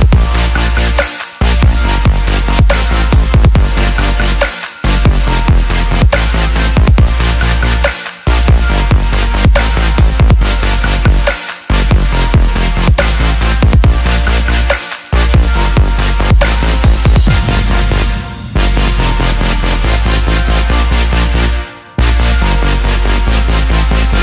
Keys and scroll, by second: 4.9 ctrl+d.